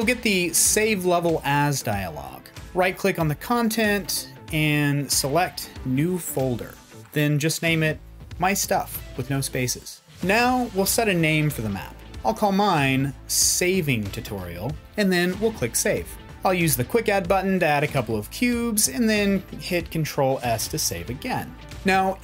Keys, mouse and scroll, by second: 2.6-5.8 right drag, 19.8 ctrl+s.